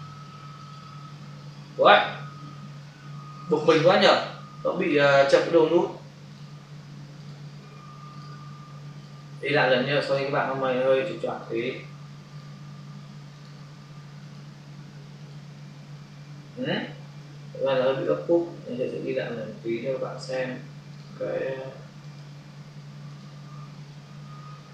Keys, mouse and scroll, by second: 0.6 click, 0.7 double click, 3.5 ctrl+alt+z, 4.8 alt+click, 11.3 click, 12.2 click, 12.4 double click, 13.2 click, 17.2 Delete, 20.9 click, 22.0 click, 23.0 click.